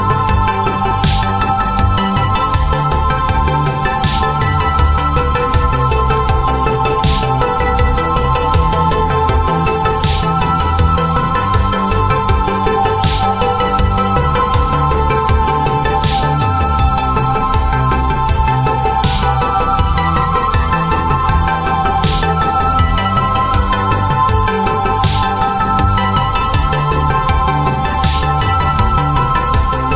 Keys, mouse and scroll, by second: 1.2 click.